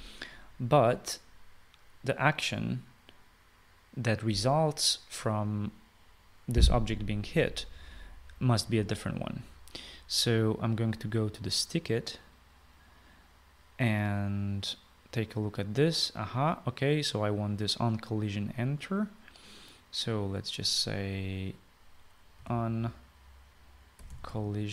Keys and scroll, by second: 23.2-24.7 typing.